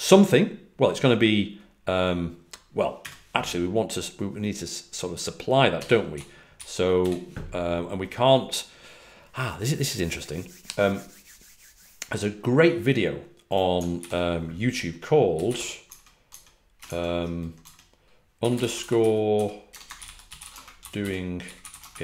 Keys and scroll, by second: 5.5-7.4 typing, 13.9 super+t, 15.2-16.0 typing, 16.2 Tab, 18.2-22.0 typing.